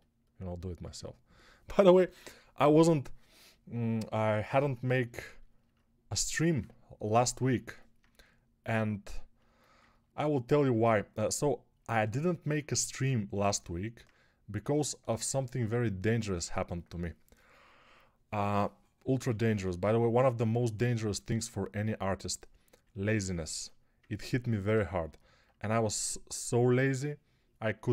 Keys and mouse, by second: 19.4 1.